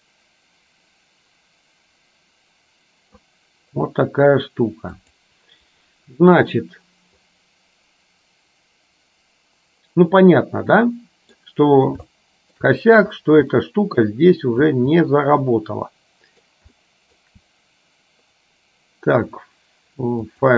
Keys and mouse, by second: 5.2 click, 10.8 middle click, 12.2 shift+middle click, 13.6 middle click, 15.2-16.4 middle drag, 16.9 shift+middle click, 20.4-20.5 drag.